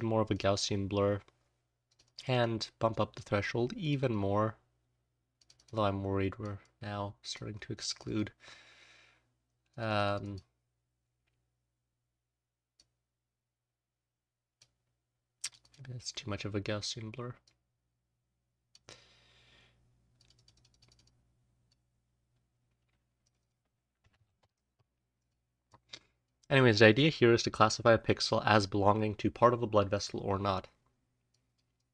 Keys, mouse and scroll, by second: 12.7-14.5 drag, 17.4-18.7 drag, 25.1 click, 25.6-26.2 drag, 26.8-29.9 drag, 31.2 click, 31.7-31.9 drag.